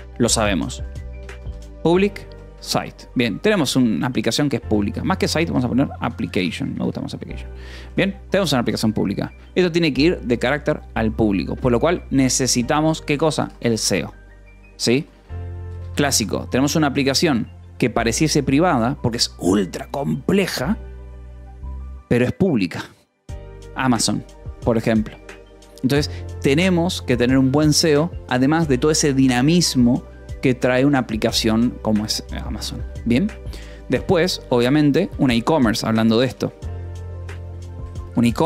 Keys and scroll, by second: 0.9-3.0 typing, 4.6-6.7 typing, 6.7 Escape, 8.4 ctrl+s, 12.3 a, 12.6 space, 12.9 -, 13.1 space, 13.6 Escape, 14.5-15.5 typing, 15.7 Escape, 16.7 ctrl+s, 27.4 b, 27.8 Escape, 32.4 :, 32.7 space, 34.5-38.4 typing.